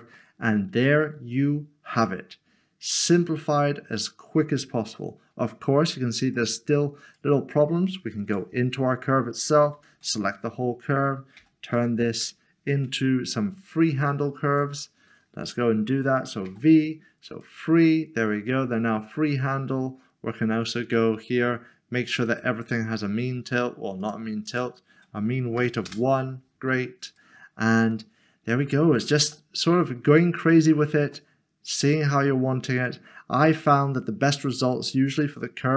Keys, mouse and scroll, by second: 0.1 click, 0.3 middle click, 6.3 click, 8.2 Tab, 11.7 typing, 12.8 Escape, 14.5 Escape, 16.5 typing, 17.3 click, 20.8 click, 24.5 double click, 25.8 Return, 27.1 Return, 27.9 click, 28.1 middle click, 29.2 a, 31.1 middle click, 35.2 middle click.